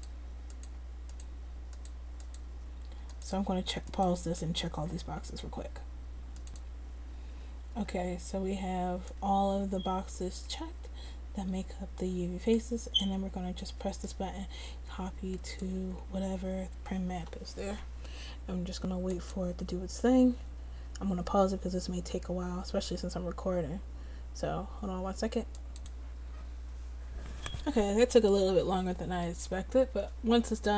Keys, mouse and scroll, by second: 5.9-9.4 middle drag, 9.4-11.1 drag, 11.1-14.5 middle drag.